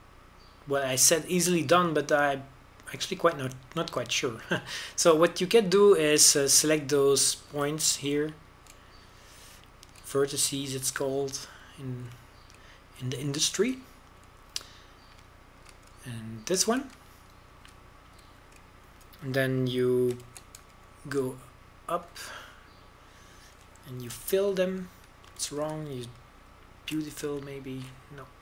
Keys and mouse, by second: 4.0 middle click, 4.2-5.7 middle drag, 11.3 middle click, 11.6 middle click, 11.9-13.5 middle drag, 14.2-16.1 middle drag, 16.8 click, 17.0-19.2 middle drag, 19.3-22.2 middle drag, 22.2 shift+d, 26.2 f, 27.4 ctrl+z.